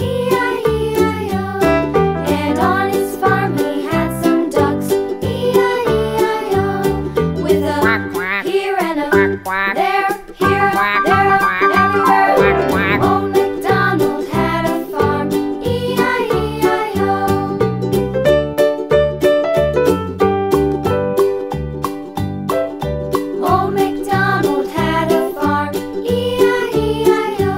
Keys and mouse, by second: 3.5 click, 7.5-8.6 middle drag, 18.0 middle click, 20.0 middle click, 22.8 Tab, 23.5 Tab, 26.9 ctrl+z.